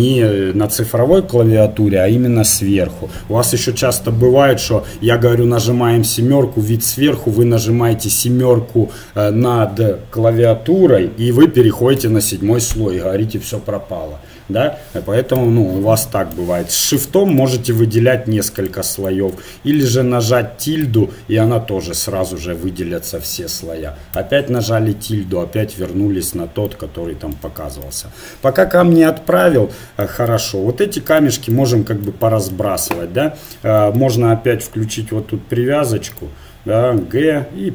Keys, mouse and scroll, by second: 12.0 7, 15.4 1, 16.9-21.6 drag, 26.8-28.6 middle drag, 30.5 middle click, 31.1-33.8 drag, 36.4 click, 37.1 g, 37.2 right click.